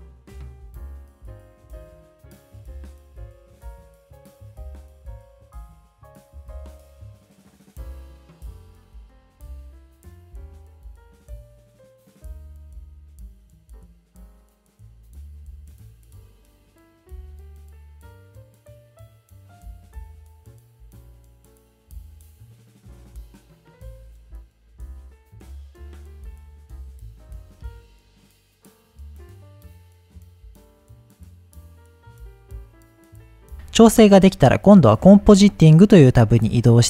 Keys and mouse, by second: 0.1 shift+click, 1.2 middle click, 3.2 click, 5.9-7.6 drag, 7.6 middle click, 7.9-11.8 drag, 13.9 click, 14.2 ctrl+s, 18.0 click, 18.3 click, 19.1 click, 19.3 click, 19.6 click, 19.9 ctrl+z, 20.4 click, 21.0 ctrl+s, 22.2 shift+middle click, 23.9 click, 26.6 ctrl+s, 28.9 click, 31.9-36.8 drag.